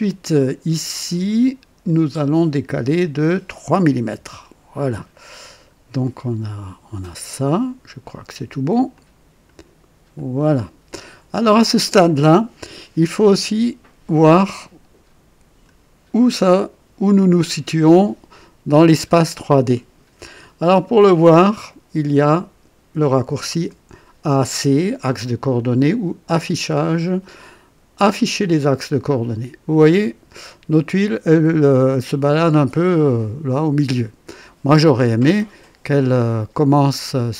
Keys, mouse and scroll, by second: 0.0 click, 1.8 click, 4.1 KP_3, 5.7-6.4 scroll up 2, 8.9-9.7 drag, 10.1 click, 11.1-11.4 scroll down 1, 13.2-15.8 drag, 26.2 click, 28.1 click, 29.7-37.1 drag.